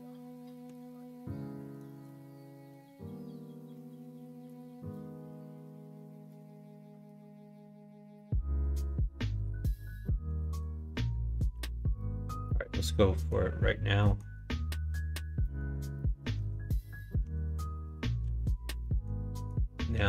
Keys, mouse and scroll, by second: 1.0 shift+middle click, 1.5 middle click, 2.3-3.7 middle drag, 4.3 middle click, 4.9 middle click, 5.2 middle click, 5.5 middle click, 6.2 middle click, 7.4-10.3 middle drag, 11.5 /, 13.2 click, 14.0 middle click, 15.4 middle click, 15.9 middle click, 16.2 Tab, 16.8 middle click, 17.2 Tab, 18.2 /, 18.8 middle click, 19.3 middle click, 19.9 Tab.